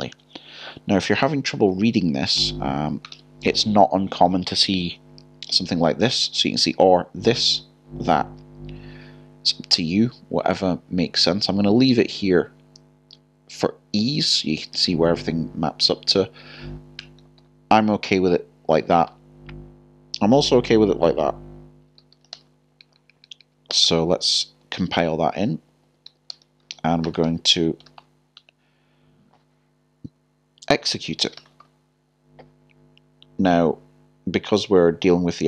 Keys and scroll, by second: 18.8-19.6 typing, 24.6 typing, 27.8 typing.